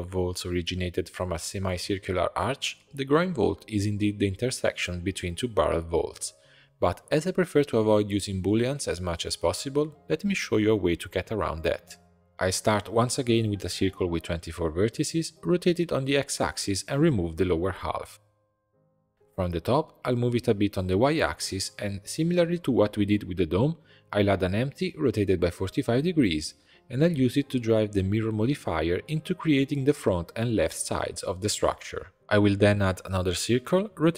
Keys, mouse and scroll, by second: 2.3 shift+d, 3.2 r, 5.3 Tab, 6.2-10.6 middle drag, 10.6 alt+\, 11.1 shift+a, 12.9-14.9 drag, 14.9 Tab, 15.5 r, 16.4 click, 16.6 b, 18.0 x, 19.1 click, 19.9 click, 20.5-21.1 scroll down 1, 21.1 g, 22.7 Tab, 22.9 click, 23.2 shift+a, 25.7 r, 26.7 click, 27.6 click, 28.3-30.1 drag, 31.7 shift+a, 34.0 Tab.